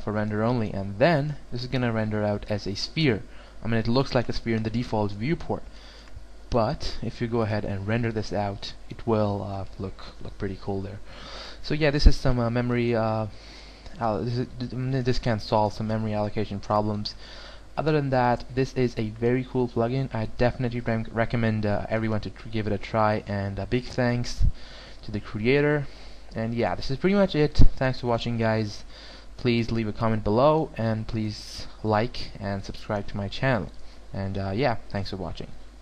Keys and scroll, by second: 11.7 alt+w.